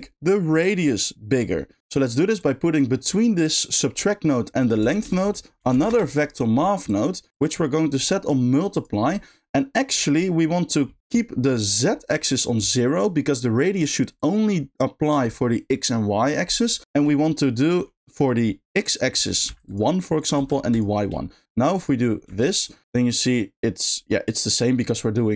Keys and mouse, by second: 1.6 middle click, 2.5 drag, 3.1 click, 4.9 shift+a, 8.8 click, 14.1-15.1 drag, 16.8 ctrl+click, 19.1 click, 20.1 click, 21.7 click, 22.2 space.